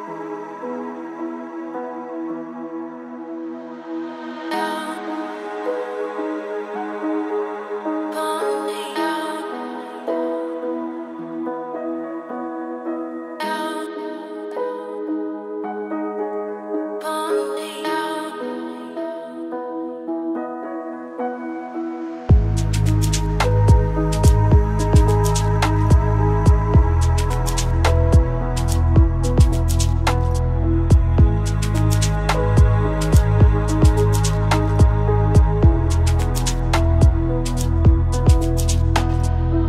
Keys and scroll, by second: 5.1 ctrl+space, 20.2 ctrl+space, 29.0 ctrl+a, 31.6 ctrl+f, 33.3 ctrl+d, 34.6 ctrl+space.